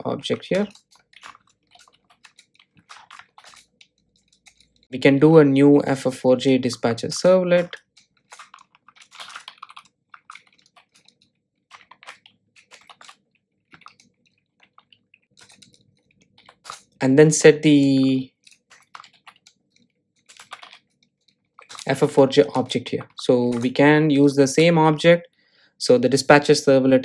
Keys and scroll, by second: 1.5 Return, 7.6 Return, 12.4 super+z, 15.9 Return.